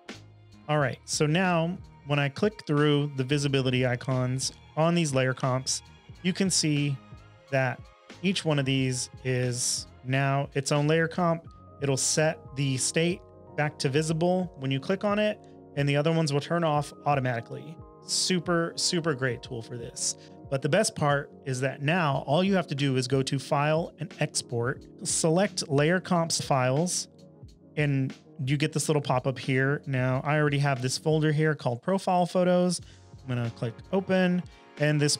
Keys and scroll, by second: 0.0-0.4 typing, 29.3 typing.